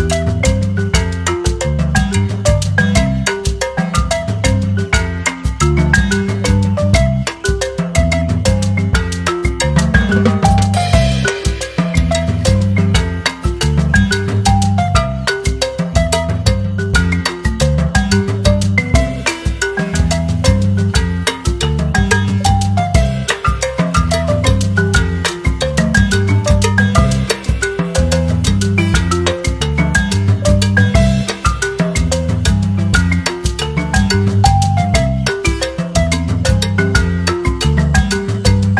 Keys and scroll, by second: 0.0-1.7 typing, 4.2-5.1 typing, 13.6 typing, 30.5-32.8 typing, 35.9-38.0 typing.